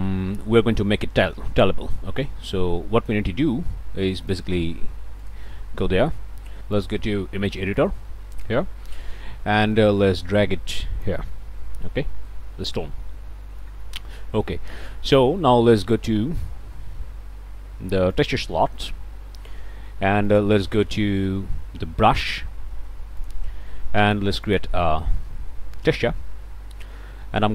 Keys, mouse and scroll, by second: 4.2 click, 5.2 click, 6.8 click, 7.7 click, 8.3-11.3 drag, 12.4 middle click, 13.2 middle click, 13.7 click, 16.4 middle click, 18.1 click, 20.3 click, 23.2 click, 24.5 click, 27.3 middle click.